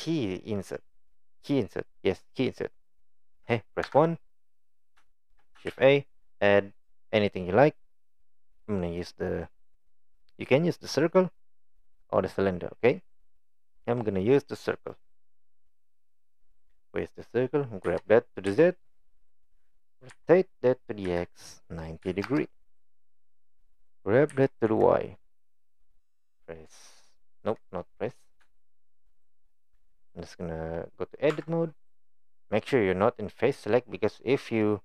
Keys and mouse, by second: 3.8 KP_1, 5.1 shift+middle drag, 5.7 shift+a, 15.8-16.1 middle drag, 17.9 g, 20.1 r, 24.3 g, 28.6-28.9 shift+middle drag, 31.3 Tab.